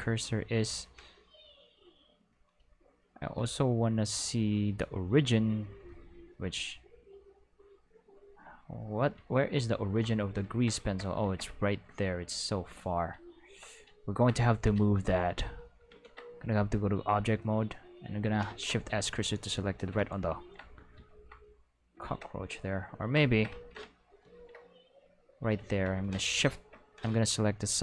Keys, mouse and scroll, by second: 1.2 click, 1.8 click, 3.3 click, 6.5-7.2 middle drag, 9.6 ctrl+middle drag, 10.0 click, 11.5 ctrl+middle drag, 12.0 middle drag, 14.5 shift+middle drag, 15.9 ctrl+Tab, 16.3 click, 17.1 right click, 18.4 shift+s, 19.0 click, 20.8 click, 21.3 drag, 22.7 middle click, 23.8-24.2 shift+middle drag, 24.2 shift+middle drag, 24.7 click, 27.6 click.